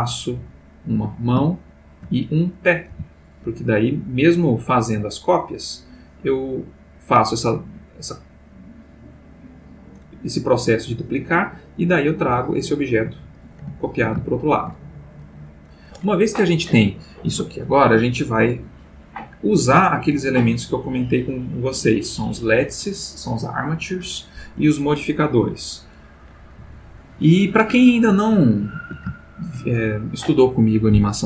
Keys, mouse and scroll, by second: 0.0 click, 0.3 g, 1.0 Escape, 1.4-2.2 shift+middle drag, 2.5 click, 2.9 g, 3.5 Escape, 4.5-5.9 drag, 7.9-11.8 drag, 12.3 g, 12.9 Escape, 13.8-14.8 ctrl+middle drag, 15.5 click, 26.7-27.8 shift+middle drag, 28.4-29.7 ctrl+middle drag.